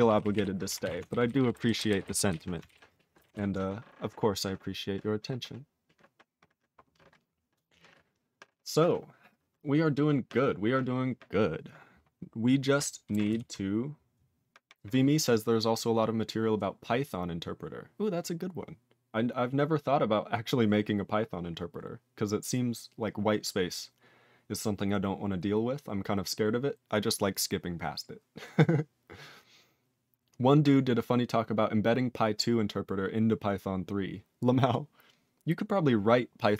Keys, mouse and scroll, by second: 0.1 ctrl+p, 0.2 ctrl+p, 0.4 ctrl+e, 0.8 ctrl+s, 1.1 alt+b, 1.2 alt+b, 1.4 alt+b, 1.5 alt+b, 1.6 alt+b, 1.8 alt+b, 1.9 alt+b, 2.0 alt+b, 2.3 alt+b, 3.3 ctrl+s, 13.3 ctrl+s.